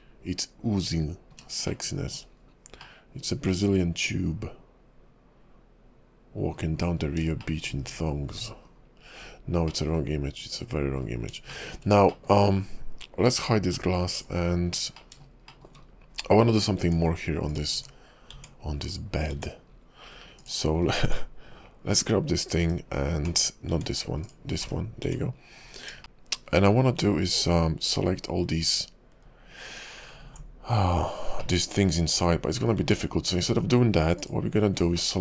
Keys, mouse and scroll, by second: 1.8 shift+middle click, 2.5-3.0 scroll up 3, 3.0 middle click, 7.0-7.6 scroll down 6, 7.6 shift+middle click, 8.3 `, 8.6 KP_5, 9.9 middle click, 10.3 KP_5, 11.1 scroll up 3, 11.7 shift+middle click, 12.3 middle click, 14.2 click, 14.8-15.1 scroll up 3, 15.1 middle click, 15.6 shift+middle click, 16.0-16.6 scroll down 3, 16.6 click, 16.8 Tab, 17.5 click, 17.7 Tab, 18.3 Tab, 18.9 click, 19.3 Tab, 19.9-20.4 scroll up 4, 20.4 click, 20.9 scroll down 4, 22.0 click, 22.6 /, 23.3 /, 23.7 Tab, 24.3 click, 24.6 /, 25.0 Tab, 25.5-25.9 scroll up 8, 26.0 shift+middle click, 26.5-27.0 scroll up 2, 30.9-31.6 scroll down 3, 31.6 middle click, 32.8 Tab, 33.3 scroll up 3, 34.2 alt+click, 35.1 middle click.